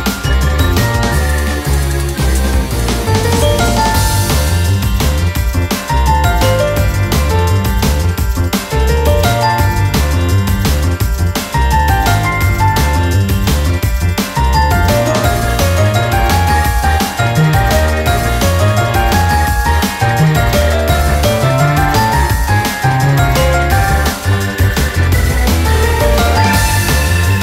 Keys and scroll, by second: 12.3 ctrl+-, 13.1 typing, 16.3 ctrl+-, 23.9 ctrl+-, 26.4 ctrl+-.